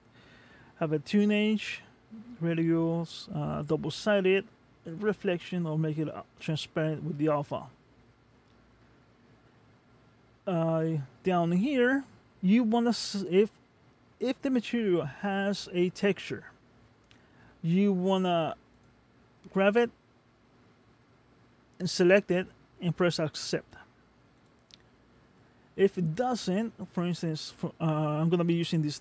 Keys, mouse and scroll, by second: 8.8-9.4 scroll down 1, 9.4-11.1 scroll down 4, 11.1-13.5 scroll down 2, 18.7 click.